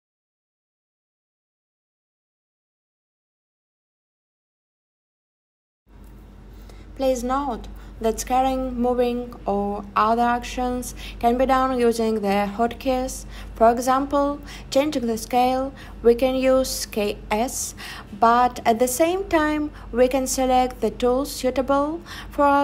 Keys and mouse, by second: 0.1 middle click, 0.3 middle click, 2.1 click, 3.1 click, 6.6 click, 6.6 right click, 13.0 click, 13.0 right click, 15.5 e, 18.2 click, 18.6 s, 21.5 click, 22.3 click.